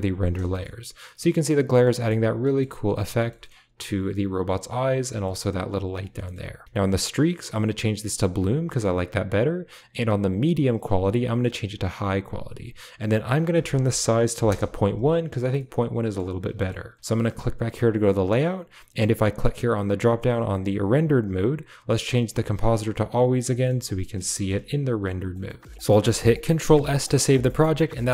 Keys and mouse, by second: 0.5 middle click, 1.1-1.7 middle drag, 1.9 shift+click, 2.3 click, 3.1 shift+click, 3.3 shift+click, 5.1 shift+drag, 6.1 click, 6.6-8.0 drag, 8.6 shift+middle click, 10.2-11.7 drag, 13.1-14.6 drag, 15.5-16.0 middle drag, 16.5 middle click, 20.1-23.3 drag, 23.4 shift+middle click, 23.7-24.0 middle drag, 24.2 middle click, 25.2-25.6 middle drag, 26.7 ctrl+s.